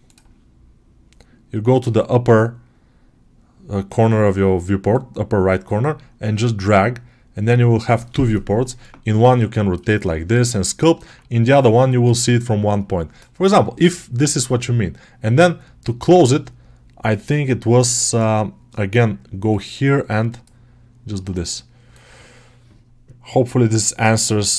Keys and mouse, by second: 4.9-8.5 drag, 8.7-9.2 alt+middle drag, 9.4-10.2 alt+shift+middle drag, 10.8 alt+middle click, 17.0-17.7 drag, 19.3 click, 21.2 alt+middle click.